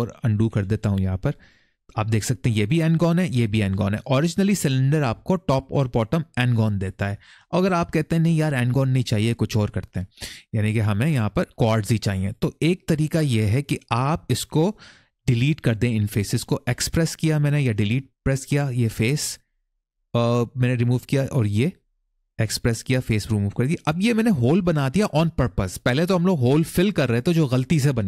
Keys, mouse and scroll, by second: 0.0 ctrl+z, 0.3 ctrl+z, 0.5 ctrl+z, 1.2 click, 2.6 middle click, 3.4 middle click, 5.4 middle click, 6.2 middle click, 12.0 click, 19.0 middle click, 20.6 click, 22.2 x, 23.5 middle click, 25.3-26.0 scroll down 1.